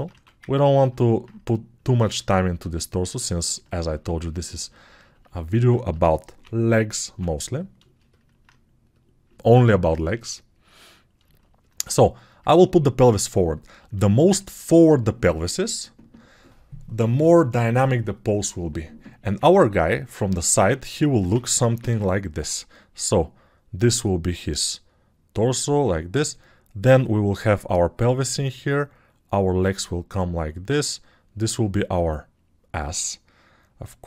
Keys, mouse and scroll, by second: 6.9 ], 8.0 alt+], 21.9 ctrl+shift+7.